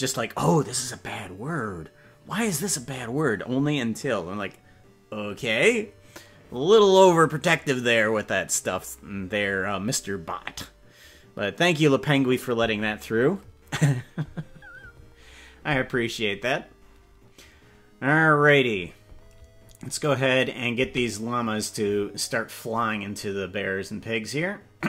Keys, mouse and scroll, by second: 16.6-18.1 scroll up 5, 18.1 scroll up 2, 20.7 space.